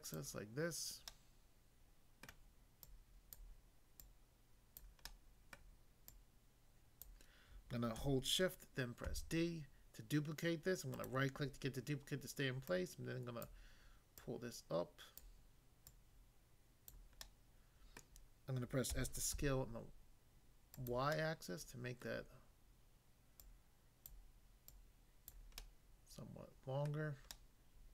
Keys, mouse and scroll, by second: 0.1 click, 1.0 click, 1.0 middle click, 2.2 middle click, 2.9 click, 3.4 click, 4.0 click, 4.7 click, 5.1 middle click, 5.5 middle click, 7.0 click, 9.1 d, 11.0 right click, 12.7 click, 13.5 click, 14.2 click, 15.1 click, 15.9 click, 16.9 click, 17.3 middle click, 17.9 middle click, 18.9-19.3 typing, 20.7 click, 21.2 middle click, 22.1 middle click, 23.3 click, 24.1 click, 24.7 click, 25.3 click, 25.6 middle click, 26.9 middle click, 27.3 middle click.